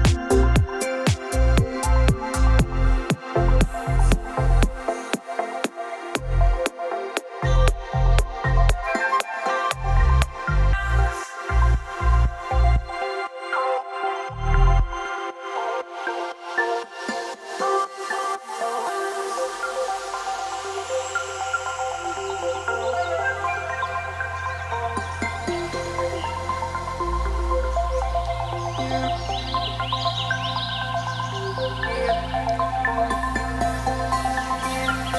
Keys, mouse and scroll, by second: 0.3 click, 0.5 scroll up 2, 1.0 click, 1.4-2.0 scroll up 3, 2.0 scroll down 1, 2.1-2.6 scroll up 1, 3.0 click, 5.7 click, 6.3 click, 6.6-7.5 scroll up 2, 7.6 o, 9.2 click, 9.6 click, 13.5 click, 15.5 click, 16.2 click, 17.9 o, 18.7 click, 19.1 click, 19.7-20.2 scroll up 1, 20.9 scroll down 1, 22.9 click, 24.7 click, 27.2 click, 28.0 click, 28.5-29.4 scroll up 8, 29.4 click, 30.0-30.6 scroll down 3, 30.6 scroll, 31.4 click, 31.9-32.5 scroll up 3, 33.1 scroll down 2.